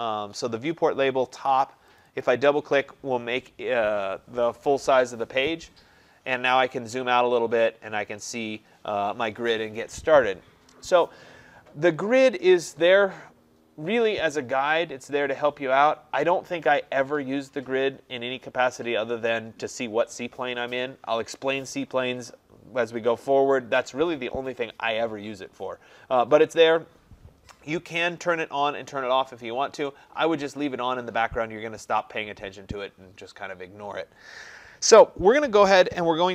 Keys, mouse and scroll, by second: 2.0 click, 2.3 click, 6.5 middle click, 6.5 middle click, 6.6 middle click, 6.9-8.0 scroll, 8.0-8.5 scroll.